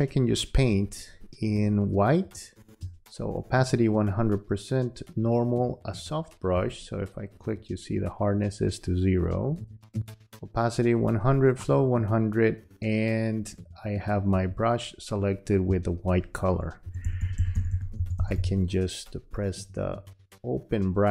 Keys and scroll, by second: 0.7 space, 16.8 [.